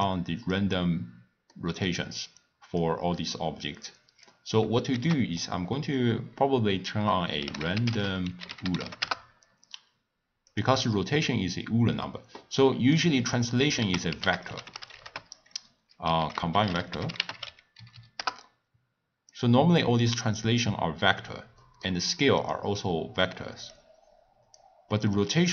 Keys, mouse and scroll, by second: 0.0 click, 1.5 middle click, 2.4 click, 3.8 click, 4.9 ctrl+a, 12.6-13.8 middle drag, 13.8 ctrl+a, 17.9 Down, 20.6 scroll down 1, 20.7-21.4 scroll up 4, 21.5 scroll down 2, 21.6-22.9 middle drag, 22.9 click, 23.7-25.5 drag.